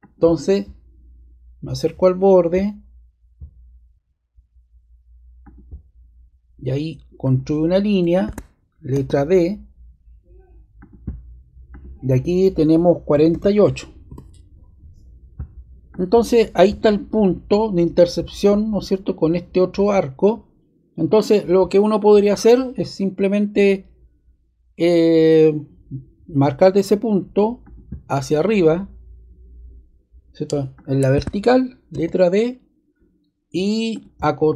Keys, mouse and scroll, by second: 7.1 click, 8.9 d, 10.7 click, 11.7 click, 12.8-13.8 typing, 14.0 Return, 15.9 click, 31.1-31.9 scroll down 1, 31.9 d, 33.9 click, 34.4 click.